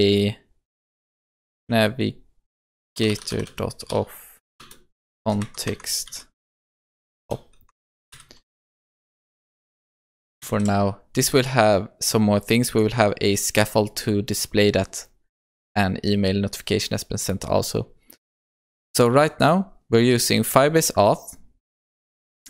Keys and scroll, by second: 4.6 Return, 10.5 ctrl+s.